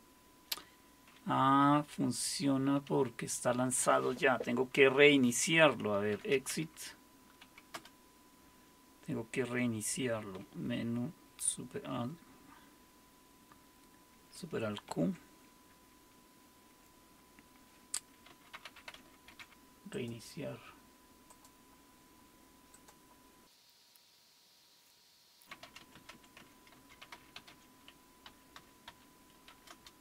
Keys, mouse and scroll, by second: 5.9-7.4 typing, 7.7 Return, 14.9 alt+super+q, 18.1-19.9 typing, 19.9 click, 21.3 click, 22.7 click, 23.9 Return, 25.1-29.5 typing, 29.7 Return.